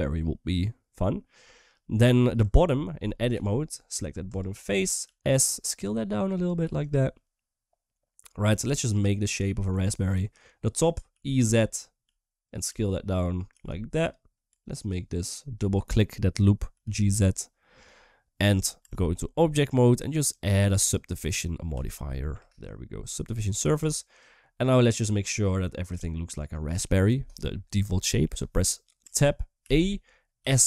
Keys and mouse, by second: 1.4-1.9 middle drag, 2.2 Tab, 3.3 3, 4.0 click, 5.2 s, 6.4 s, 7.0-8.2 middle drag, 8.7 click, 9.1 middle click, 11.8 e, 12.8 s, 13.8 g, 14.3 2, 14.5 click, 16.7 g, 18.6 Tab, 20.7-22.1 drag, 23.2 click, 24.7 middle click, 25.9 shift+middle click, 28.8 Tab, 29.4 a.